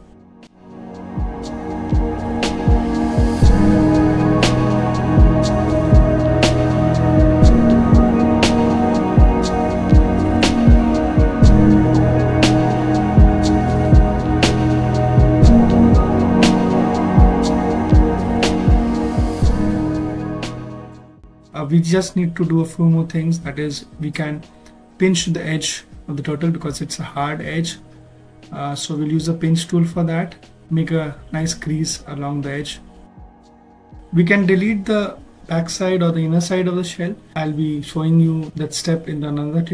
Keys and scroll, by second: 1.9 s, 7.8 ctrl+alt+s, 11.5 s, 12.8 Caps_Lock, 15.6 ctrl+alt+s, 21.5 b, 21.8 p, 21.9 i, 33.3 s, 34.1 ctrl+shift+z.